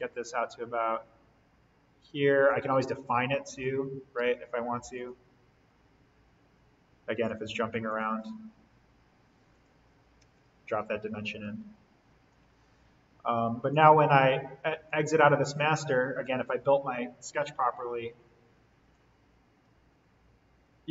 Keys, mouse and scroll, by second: 3.6-3.9 scroll down 1, 4.1 d, 4.9 click, 5.7-7.2 scroll down 1, 7.2 click, 10.2 Escape, 10.6 scroll up 1, 12.3-13.6 scroll down 1, 13.6-18.7 drag, 18.8-20.9 drag.